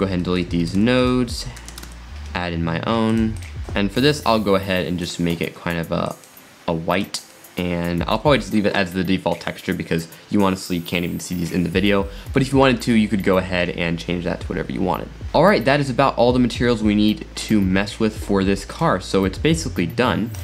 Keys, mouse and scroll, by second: 0.2 middle click, 0.7 shift+a, 3.6 click, 4.1 click, 5.0 click, 7.1 click, 7.3-10.7 middle drag, 15.2-15.6 scroll down 5, 15.6 middle click, 16.4-17.7 middle drag, 17.7-18.2 scroll down 3, 18.3-18.7 middle drag, 18.7 click, 20.3 click.